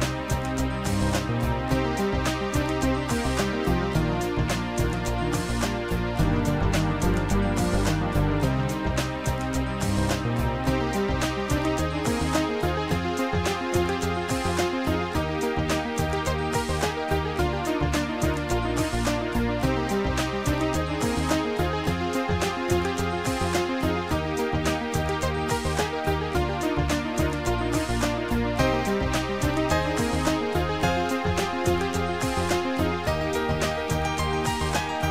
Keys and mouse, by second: 0.9 click, 2.0 click, 8.8 shift+click, 13.0 shift+click, 13.9 shift+click, 15.0 Return, 17.9 Return, 17.9 click, 19.7 click, 20.6 click, 23.0 shift+click, 25.1 Delete, 32.1 click, 34.0 click.